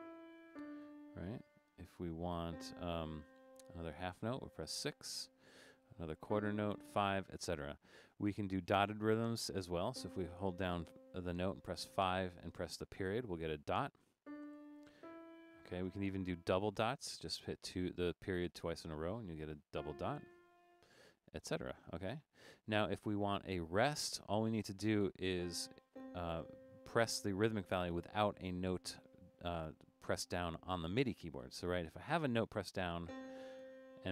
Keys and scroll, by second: 0.0-0.9 typing, 5.0 6, 7.0 5, 13.1 typing, 14.5 typing, 15.9 typing, 17.6 ., 18.6 typing, 20.5 3, 33.7 5.